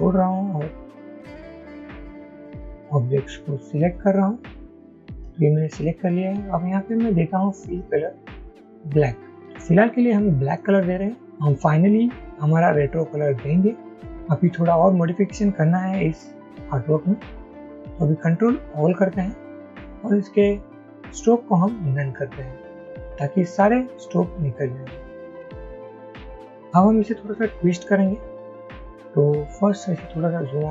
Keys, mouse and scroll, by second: 0.2 shift+click, 1.1 shift+click, 1.6 shift+click, 2.1 shift+click, 2.5 shift+click, 3.9 shift+click, 4.7 shift+click, 18.9 ctrl+a, 30.5 alt+scroll down 1.